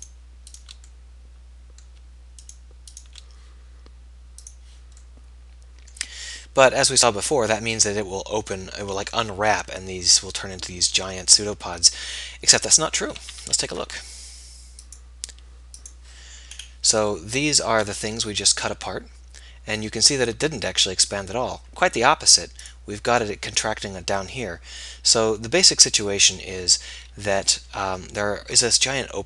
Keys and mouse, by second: 1.4-4.9 middle drag, 6.2 middle click, 13.5 a, 13.9 a, 24.6-26.4 middle drag.